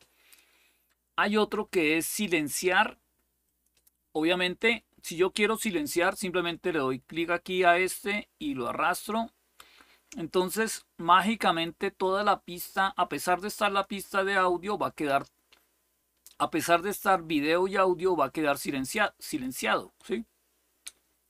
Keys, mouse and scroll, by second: 0.0-1.7 scroll down 2, 1.7-3.2 scroll down 1, 3.2 click, 6.6-8.7 drag, 11.0 click, 13.3 click, 18.7 click.